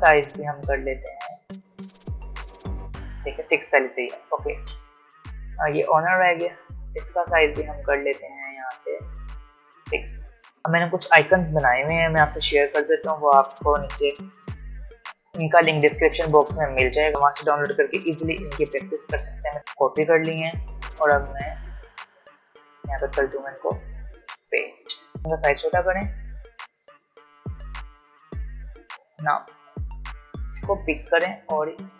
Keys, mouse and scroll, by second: 16.8 click, 22.7 click, 24.1 ctrl+v, 25.2-26.8 alt+shift+drag, 26.8 alt+scroll up 1, 28.0-31.5 drag, 31.5 alt+scroll up 1.